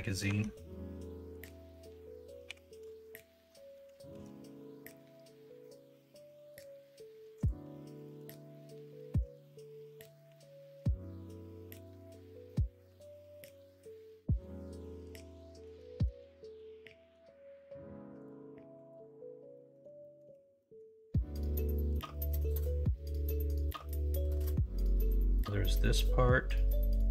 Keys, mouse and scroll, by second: 0.2 Tab, 0.5 middle click, 2.4 2, 4.1 ctrl+b, 9.1 3, 10.2 i, 16.4 ctrl+b, 19.5 middle click, 20.0 shift+middle click, 20.6 middle click, 21.3 middle click, 21.7 shift+middle click, 22.5 middle click, 24.3 Tab.